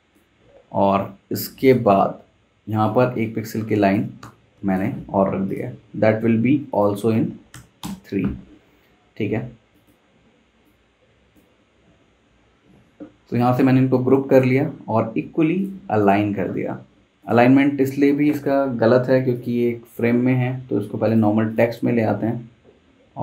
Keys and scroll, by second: 4.2 v, 7.5 3, 7.8 Return, 12.6 super+g.